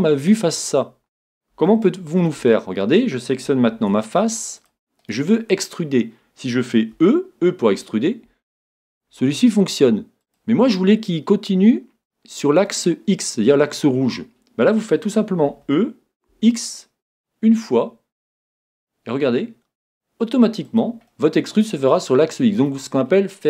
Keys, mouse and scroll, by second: 1.7-3.7 middle drag, 3.7 ctrl+Tab, 5.0-6.8 right drag, 6.8 right click, 7.0 e, 10.3-12.1 drag, 15.5 e, 20.8-22.5 drag, 22.2 right click.